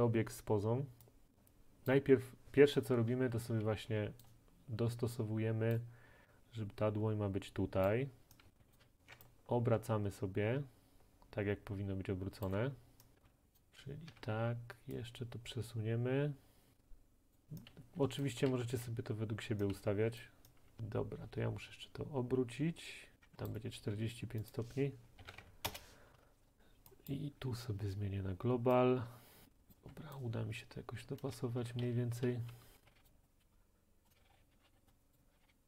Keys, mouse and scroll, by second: 1.9 click, 3.4 a, 3.9 w, 4.2 click, 5.8 click, 5.8 right click, 5.8 typing, 7.9 click, 8.3-9.4 typing, 8.8 click, 12.5 ctrl+right click, 12.9-14.1 typing, 13.6 click, 17.3 click, 17.8-20.3 typing, 18.3 right click, 20.2 click, 23.2 right click, 23.5 click, 25.3-26.6 typing, 25.7 Return, 26.6 click, 27.9 middle click, 27.9 typing, 29.7 click, 29.8 typing, 30.2 middle click, 31.2-32.9 typing, 33.0 click, 34.1 click, 34.2-35.6 typing, 34.9 click, 35.1 click.